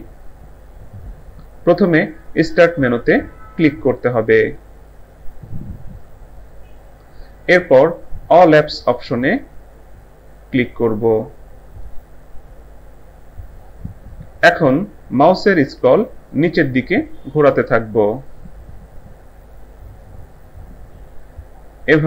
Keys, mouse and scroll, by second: 6.0 click, 11.9 click, 16.0 scroll down 1.